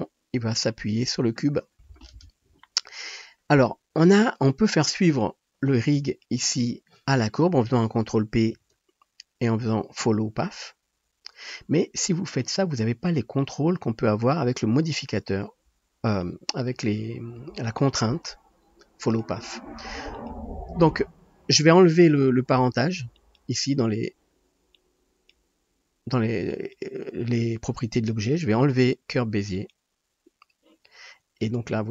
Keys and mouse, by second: 5.2 middle click, 5.2-16.1 drag, 8.5 ctrl+p, 13.4 middle click, 13.4 right click, 16.1 middle click, 16.2-20.1 drag, 20.1 middle click, 20.3-23.1 drag, 23.1 middle click, 23.4-24.9 drag, 24.9-26.7 middle drag, 26.7-29.5 drag, 29.5 middle click, 29.8-31.9 drag, 31.6 space.